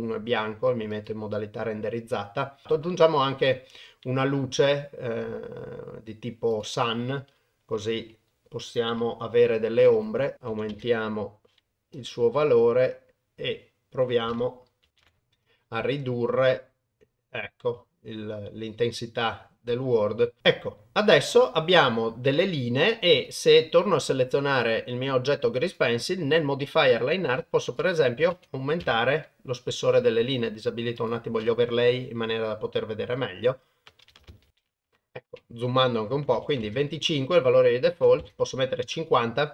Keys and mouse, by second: 2.6 shift+a, 7.8 g, 9.8 r, 10.3 click, 12.0 click, 25.7 click, 27.8-28.8 drag, 31.0 click, 35.9 click, 37.5 click.